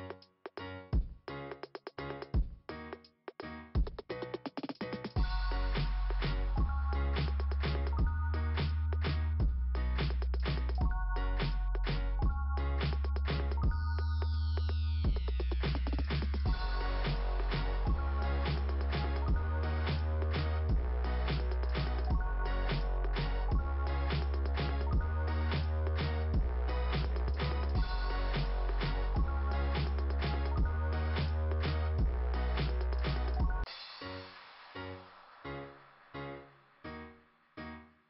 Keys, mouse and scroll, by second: 0.5 click, 6.7 click, 7.0 click, 10.2 click, 12.1 scroll up 2, 17.3 scroll up 2, 19.5 click, 21.5 click, 21.9 click, 22.6 scroll down 1, 29.0 click, 32.1 scroll up 1, 34.8 click, 35.0 click, 35.2 click, 36.3 click, 37.8 right click.